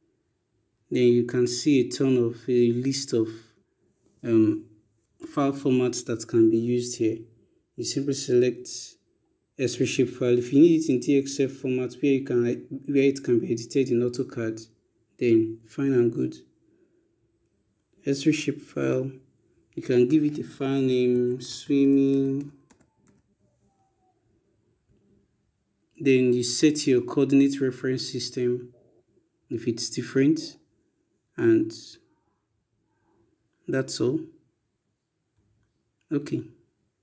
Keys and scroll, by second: 20.0-22.7 typing.